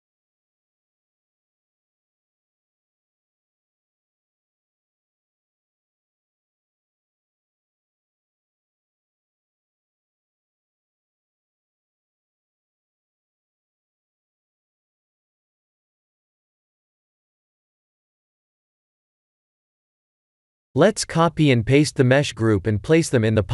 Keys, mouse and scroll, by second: 0.1 right click, 2.2 shift+d, 3.9 r, 4.7 g, 6.6-7.0 scroll down 3, 7.1 shift+middle click, 7.7 shift+middle click, 7.9 shift+d, 9.5 r, 11.0 g, 12.1 shift+d, 15.1 r, 16.0 g, 18.1 click, 19.4 b, 21.7 shift+middle click, 22.5 shift+middle click.